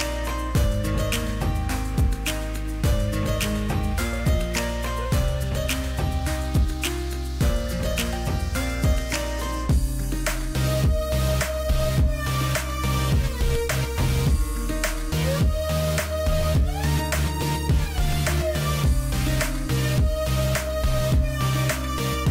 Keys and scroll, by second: 8.8 alt+space, 10.0 space, 10.8 ctrl+space, 11.1 ctrl+space, 20.6 space.